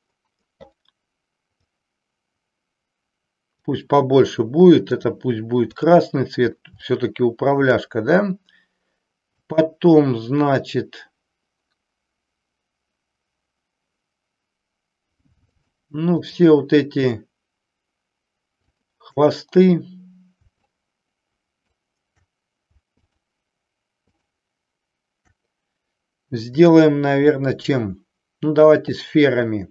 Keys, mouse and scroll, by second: 1.7-3.7 drag, 6.9 shift+middle click, 9.3-10.7 drag, 20.8-21.8 shift+drag, 22.9 shift+click, 24.1 shift+click, 26.4-29.7 drag.